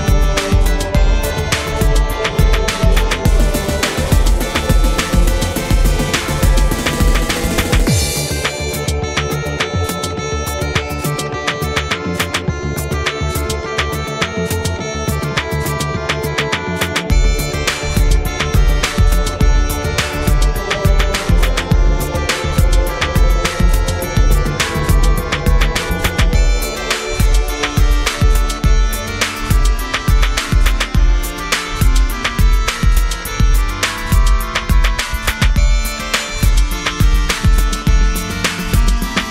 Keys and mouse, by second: 0.2-2.8 middle drag, 2.6 click, 2.6 right click, 3.8 click, 4.3 middle click, 4.9 f, 5.2 middle click, 5.4 click, 6.0 middle click, 6.4 f, 6.5 click, 7.1-8.7 drag, 8.7 middle click, 9.1 click, 10.3-12.3 drag, 11.9-13.4 middle drag, 13.4 click, 13.8-15.5 drag, 15.5 middle click, 16.7 click, 16.7 right click, 18.1 shift+a, 18.9 ctrl+s, 19.6 shift+c, 20.2 shift+a, 21.9 middle click, 22.3 click, 22.8 s, 23.7-25.8 drag, 25.8 middle click, 25.9 click, 27.3 click, 27.7 f, 28.7 f, 29.5-30.5 drag, 31.0-37.7 drag, 32.7 right click, 33.8 right click, 34.7-37.1 right drag, 37.6 right click, 37.7 middle click, 37.8 click, 37.8 right click, 38.5 middle click, 38.6 click, 38.6 right click.